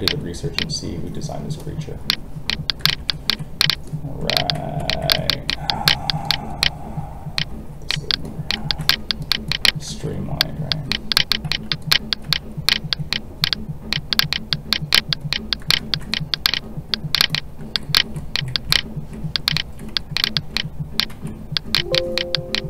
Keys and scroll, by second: 9.9 alt+a, 21.1 alt+a.